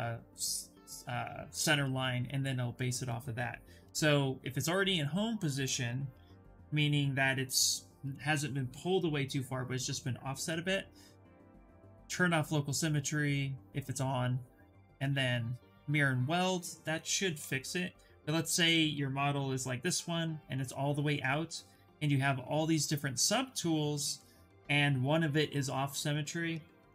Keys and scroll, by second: 19.1 w, 24.2 q.